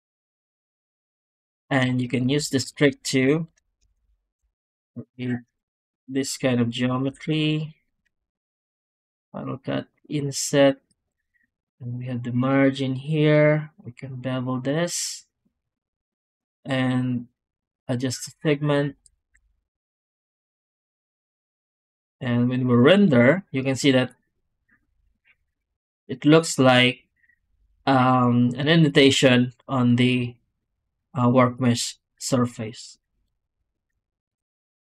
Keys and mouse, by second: 0.3 z, 1.9 click, 2.1 Tab, 2.6 alt+shift+z, 3.9 alt+a, 4.3 3, 4.4 click, 4.8 shift+click, 5.1 shift+click, 5.5 click, 7.0 Tab, 8.1 w, 21.4 z.